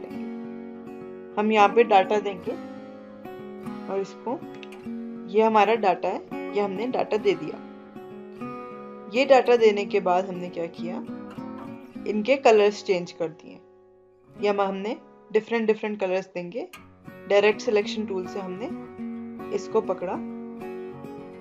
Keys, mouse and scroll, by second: 2.9 Right, 7.5 click, 17.1-19.3 drag.